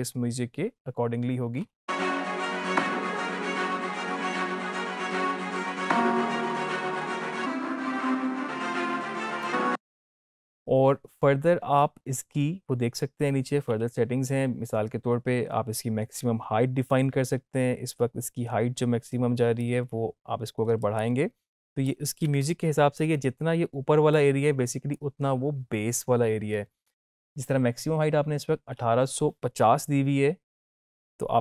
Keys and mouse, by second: 1.5 space, 9.4 space, 19.5-31.1 drag, 31.1-31.4 drag.